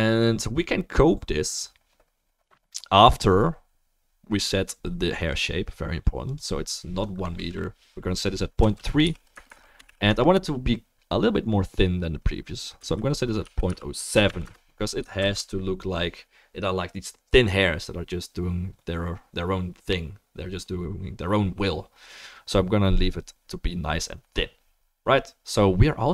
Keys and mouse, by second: 9.5 BackSpace, 15.2 ctrl+s.